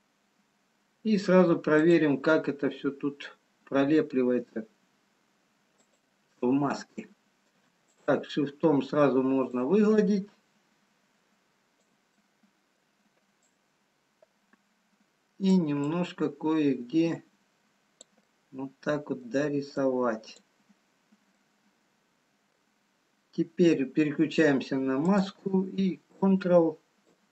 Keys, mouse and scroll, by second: 0.6-1.3 scroll down 1, 2.3 scroll down 7, 3.6 scroll down 1, 5.1 f, 6.3 middle click, 8.0 shift+click, 10.8 click, 12.2 middle click, 13.9 click, 16.2 click, 18.5 middle click, 20.0 click, 20.8-22.0 scroll down 3, 22.0 middle click, 22.0-23.3 scroll down 1, 25.1 click, 27.0 ctrl+click.